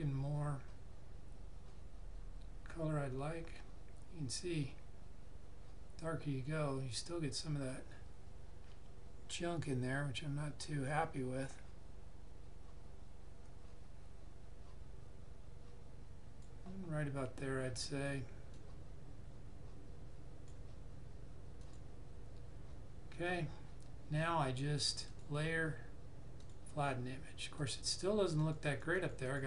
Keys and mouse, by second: 25.0 click.